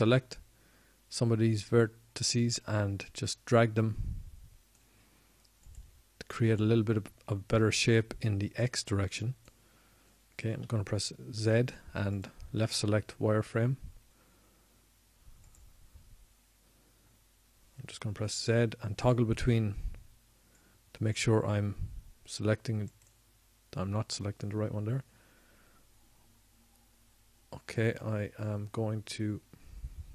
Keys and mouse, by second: 0.9 ctrl+Tab, 5.8-8.3 drag, 9.2-12.6 drag, 13.9 z, 15.5 z, 17.6 middle click, 19.9 middle click, 20.2-21.7 drag, 21.4 z, 22.5 z.